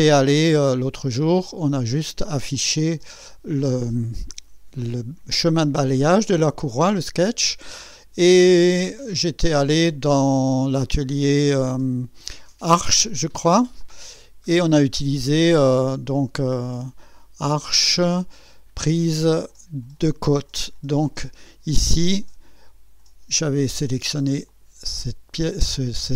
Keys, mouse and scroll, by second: 0.1 click, 0.4 space, 1.3 click, 2.5 click, 2.9 space, 3.0 space, 8.8 click, 13.8 click, 17.5 click, 19.5 click, 24.5 click.